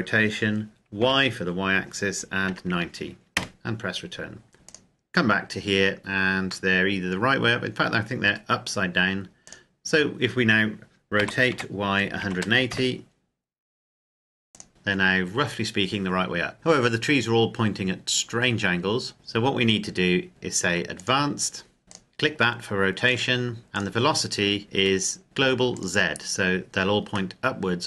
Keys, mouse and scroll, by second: 0.8 y, 2.2 KP_9, 2.5 KP_0, 3.1 KP_Enter, 4.5 click, 6.0-6.5 scroll down 1, 6.5 middle click, 9.3 click, 11.0 r, 11.3 y, 11.8 KP_1, 11.9 KP_8, 12.5 KP_Enter, 14.7 KP_0, 16.5 scroll up 1, 19.1 right click, 19.4-20.3 scroll up 1, 20.8 click, 22.9 click, 25.6 click, 26.6-27.1 scroll down 1, 27.1 middle click.